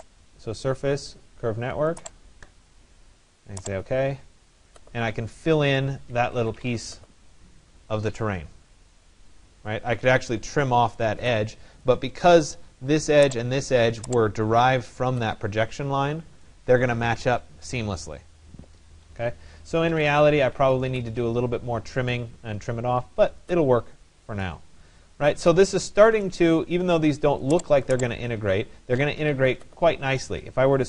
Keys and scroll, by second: 5.9 Escape, 19.5 Escape, 28.7 Escape, 29.7 Escape.